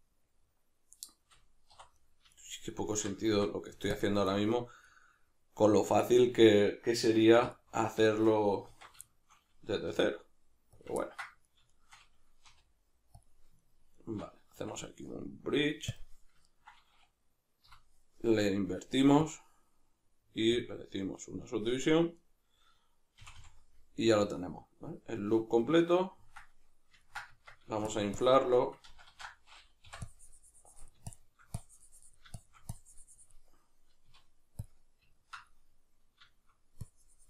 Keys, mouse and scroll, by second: 1.7 3, 2.0 right click, 2.3 shift+right drag, 2.7 shift+right click, 2.9 shift+right click, 3.3 x, 4.9-7.5 middle drag, 7.4 2, 7.5 right click, 8.1 shift+right click, 8.7 alt+q, 9.1-10.9 shift+middle drag, 9.9 r, 10.9 click, 11.1-11.5 ctrl+middle drag, 11.5 right click, 11.7 shift+right click, 12.4 r, 13.2 click, 13.6 shift+right click, 14.0 shift+right click, 14.6 w, 16.4-22.2 ctrl+middle drag, 17.6 F9, 22.2 right click, 23.2 f, 25.6-27.9 middle drag, 27.3 Tab, 27.9-35.2 shift+drag, 28.9 ctrl+z, 34.1 q, 35.2-36.9 ctrl+middle drag, 36.9-37.2 drag.